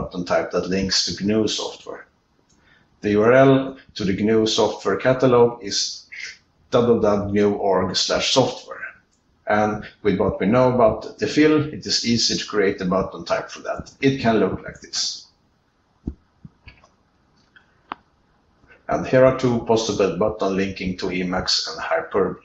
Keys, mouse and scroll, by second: 20.3 ctrl+r, 20.3 ctrl+n, 20.3 ctrl+space, 20.3 ctrl+e, 20.3 ctrl+b, 20.3 alt+Return, 20.3 ctrl+f, 20.3 click, 20.3 q.